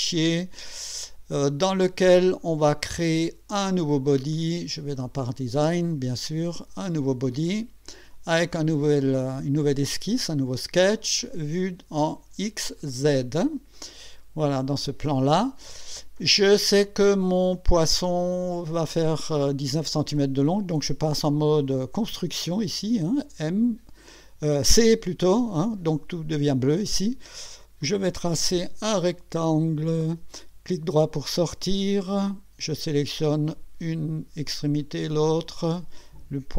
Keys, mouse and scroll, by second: 1.8 click, 4.3 click, 4.9 click, 7.5 click, 10.0 click, 12.8 click, 13.7 click, 17.3 click, 27.8 click, 28.6 click, 29.8 click, 30.6 right click, 32.9 click, 34.8 click.